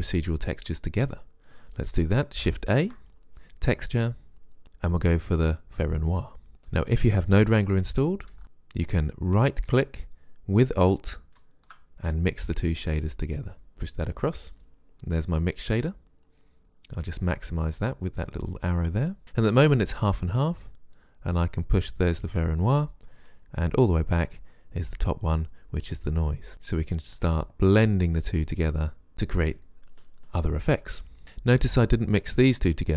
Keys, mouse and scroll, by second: 1.5 click, 2.8 shift+a, 9.1-11.4 drag, 13.7-18.7 drag, 21.0 click, 21.5 middle click, 22.0 click, 26.5 click, 27.3 click.